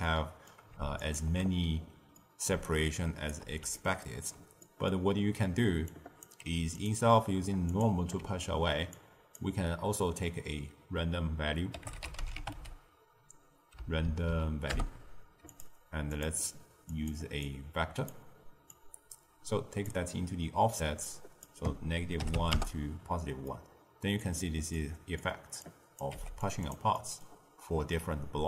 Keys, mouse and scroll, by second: 0.0-1.0 middle drag, 1.0 alt+shift+click, 2.1 middle click, 2.4 d, 2.6-3.3 right drag, 3.3 d, 3.7-5.0 ctrl+middle drag, 5.0-5.8 scroll down 2, 5.8 click, 6.3 g, 7.6 click, 8.8 drag, 14.0 Down, 16.1-17.5 drag, 18.6 click, 21.0-23.4 drag, 23.4-25.6 middle drag, 25.6 drag, 26.1 g, 26.6 click, 26.9-28.4 middle drag.